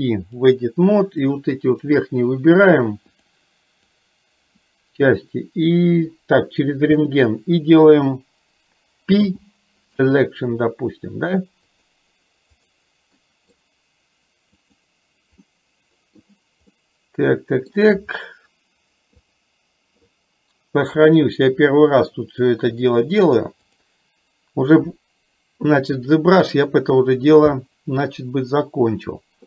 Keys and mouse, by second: 1.3 click, 3.8 click, 11.7-12.8 drag, 13.2 middle click, 14.7 click, 15.5 middle click, 16.7-17.7 middle drag, 19.3 click, 21.1-23.5 drag, 23.7-29.4 drag.